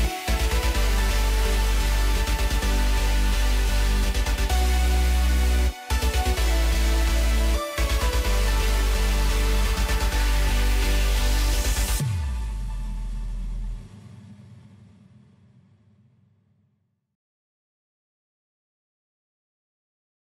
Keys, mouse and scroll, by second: 2.2 scroll down 2, 2.4-3.5 middle drag, 3.5 click, 3.9 click, 4.2-5.0 scroll up 2, 5.0 click, 6.2-7.5 drag, 9.7-11.3 scroll down 4, 11.3-12.3 drag, 12.3-13.2 scroll up 5, 13.2 drag, 15.7-16.1 scroll down 2, 16.1-17.5 middle drag, 17.5 click, 17.9 click, 20.2 click.